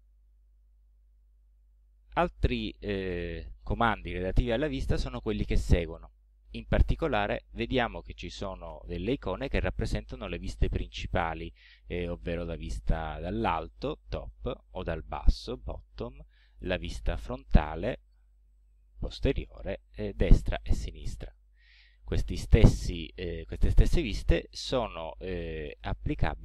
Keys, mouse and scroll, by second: 14.0 click, 15.6 click, 17.6 click, 19.0 click, 20.2 click, 21.0 click, 24.4 click, 25.6-26.4 middle drag.